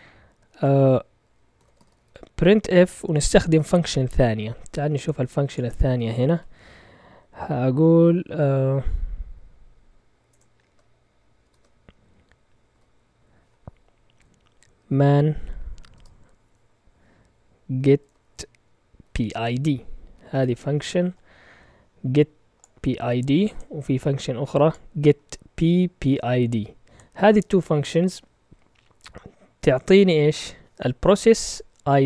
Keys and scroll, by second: 1.3-2.5 typing, 6.3 q, 10.3 BackSpace, 11.5 ctrl+Tab, 12.7 q, 14.6-15.9 typing, 17.8-21.0 typing.